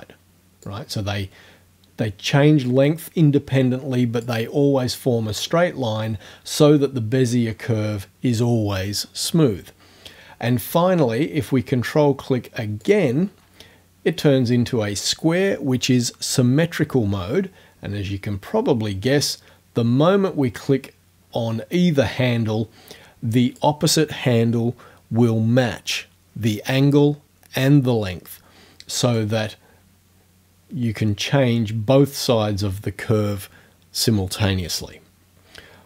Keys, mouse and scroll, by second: 0.7-4.4 drag, 12.8 ctrl+click, 19.4-23.8 drag, 29.2-35.0 drag.